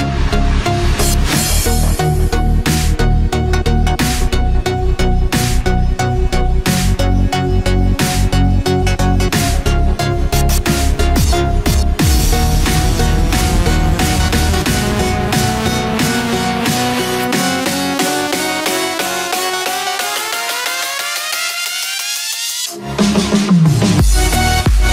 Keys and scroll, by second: 22.4 ctrl+-, 23.1 ctrl+=.